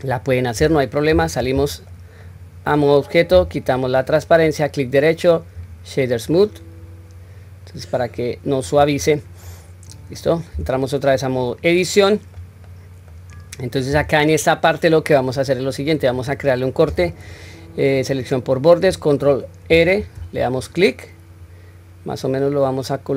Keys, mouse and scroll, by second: 1.2 Tab, 1.7 middle click, 2.2-2.7 middle drag, 3.3 q, 3.7-4.1 scroll down 1, 4.3 right click, 6.3-8.7 middle drag, 9.0-9.4 scroll up 1, 9.5 middle click, 10.6 Tab, 11.1-11.4 scroll up 1, 11.4 middle click, 12.7 middle click, 19.7 ctrl+r.